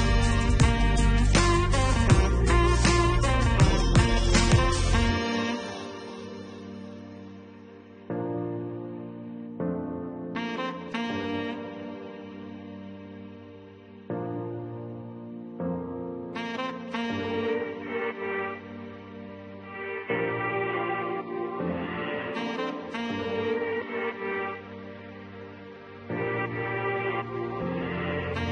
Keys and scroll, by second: 21.3-22.8 typing.